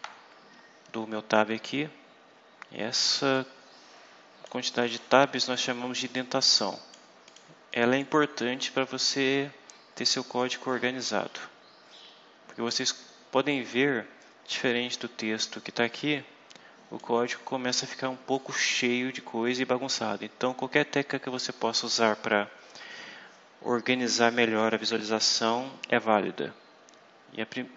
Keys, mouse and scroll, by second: 0.9 Tab, 3.3-4.5 drag, 4.8 click, 6.1 click, 7.2 click, 7.6 click, 9.2 scroll up 2, 9.8 scroll up 2, 10.4 scroll up 2, 10.7 scroll down 2, 11.2 scroll down 2, 12.7-13.0 scroll up 2, 14.6 click, 16.9-18.5 drag, 18.6 scroll down 2.